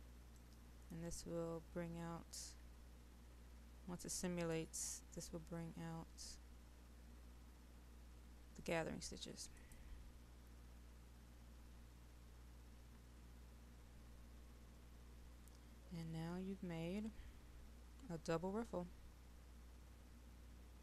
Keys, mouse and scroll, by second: 0.6 middle click, 1.3-1.7 scroll down 1, 1.7-2.1 scroll up 1, 2.1-2.5 scroll down 1, 2.5-5.2 middle drag, 9.6 click.